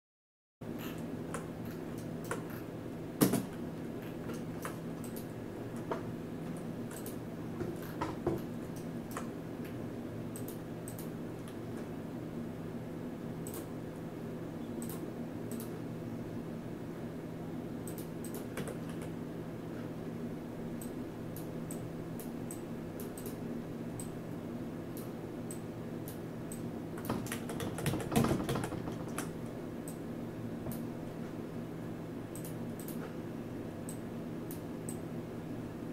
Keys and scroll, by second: 3.2 space, 6.4 F9, 18.6 w, 27.3 ctrl+z, 27.6 ctrl+z, 27.8 ctrl+z, 28.1 ctrl+z, 28.4 ctrl+z.